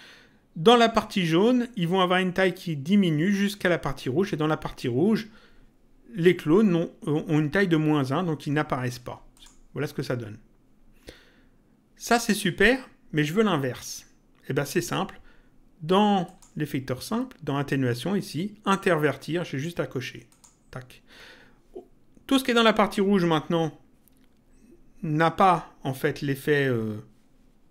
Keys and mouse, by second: 9.3 click, 16.2 click, 20.2 click.